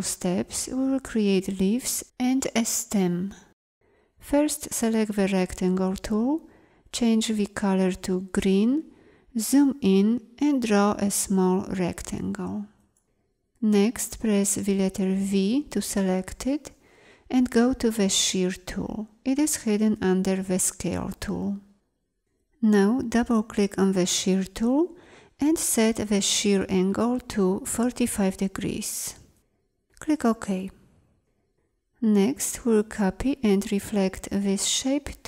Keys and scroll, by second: 8.3 z, 10.3 m, 14.9 v.